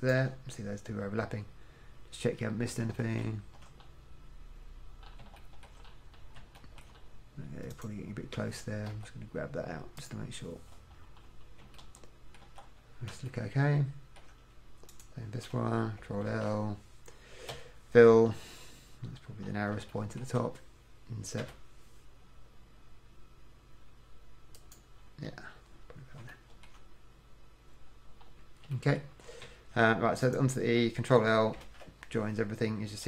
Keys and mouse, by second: 1.5-2.6 middle drag, 6.1 middle click, 9.0 g, 13.4 middle click, 13.6 middle click, 15.0-16.4 right drag, 16.4 ctrl+l, 17.6 f, 18.2 middle click, 21.6 i, 30.4-31.7 drag, 31.7 ctrl+l.